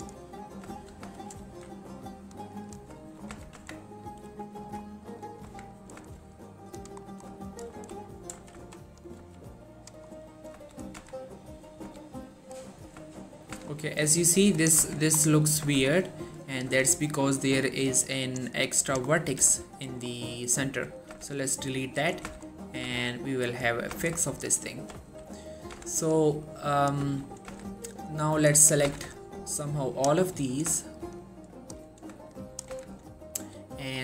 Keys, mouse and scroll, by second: 0.0 click, 0.1 right click, 0.7 scroll up 1, 0.9 shift+middle click, 1.3 alt+space, 1.5 alt+s, 2.7 click, 3.1 shift+middle click, 3.4 z, 3.7 Tab, 3.9-4.2 scroll down 1, 4.2-4.8 middle click, 5.6 Tab, 5.8 middle click, 6.3 scroll up 1, 6.9 click, 7.2 middle click, 7.6 shift+click, 7.9 3, 8.5 g, 9.2 click, 9.3 g, 9.9 click, 10.2 scroll down 1, 10.3 middle click, 11.1 z, 11.3-11.9 middle click, 12.0 a, 12.3 middle click, 12.7 scroll up 1, 13.2 shift+middle click, 13.3 scroll up 1, 13.6 z, 13.9 scroll down 1, 14.0 middle click, 14.7 click, 15.0 Tab, 15.3 scroll up 1, 15.8 Tab, 16.0 scroll down 1, 16.2-16.8 middle click, 16.8 z, 17.1 middle click, 18.4 click, 19.2 middle click, 19.5 g, 20.0 right click, 20.2 middle click, 21.3 x, 22.1 click, 22.4 z, 22.6 scroll down 1, 22.7 middle click, 23.0 Tab, 23.2 middle click, 23.7 scroll down 1, 24.0 Tab, 24.3 shift+middle click, 24.5-25.1 scroll up 1, 25.1 3, 25.7 scroll down 1, 25.8 z, 26.6-27.2 click, 27.2 shift+middle click, 27.4 scroll up 1, 27.6 z, 28.8 shift+middle click, 29.0 shift+z, 29.3-30.2 shift+click, 30.4 shift+middle click, 31.3-32.0 shift+click, 32.8 shift+z, 33.7 s, 33.9-34.0 scroll up 1.